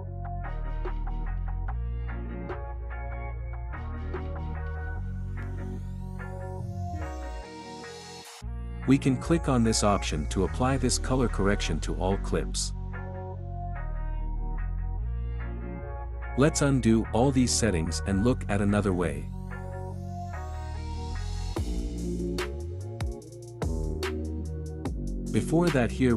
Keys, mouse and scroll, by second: 9.5 scroll down 1, 13.0 click, 15.9-18.0 drag, 18.1 click, 22.4 ctrl+z, 25.2 click.